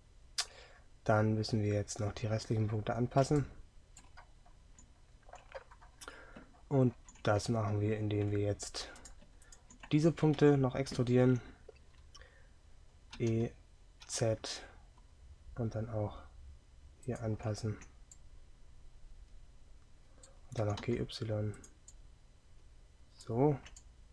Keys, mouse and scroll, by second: 13.3 e, 21.6 g.